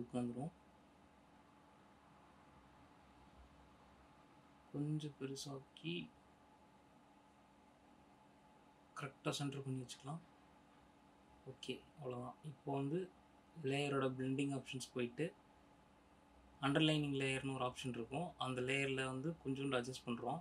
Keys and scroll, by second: 3.2 ctrl+t.